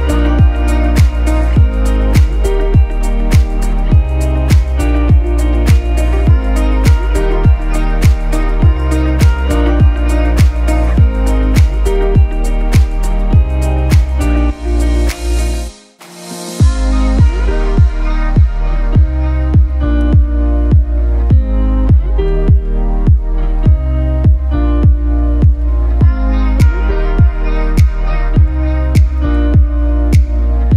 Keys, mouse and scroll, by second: 22.7-30.7 drag.